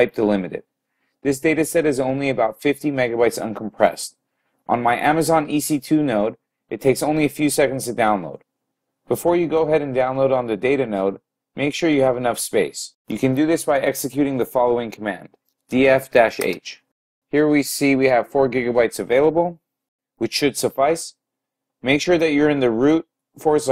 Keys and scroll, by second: 15.4-16.2 typing.